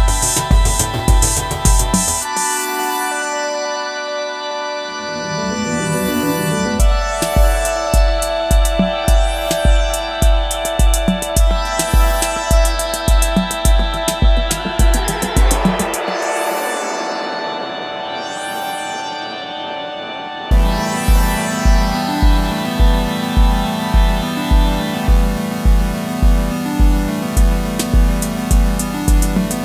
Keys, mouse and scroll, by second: 7.1-8.3 typing, 9.4 double click, 10.8-11.1 typing, 12.9 typing, 17.5-17.8 typing, 21.7-22.4 typing, 23.7 typing.